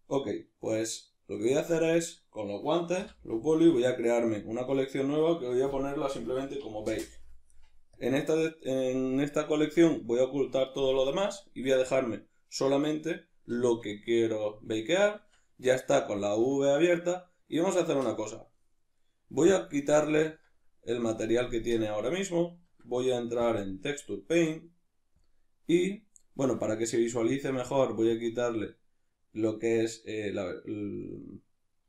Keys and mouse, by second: 9.4 click, 18.6-19.6 middle drag, 19.6 click, 20.2 Tab, 21.2-25.2 drag, 22.7 Tab, 27.3-31.8 drag.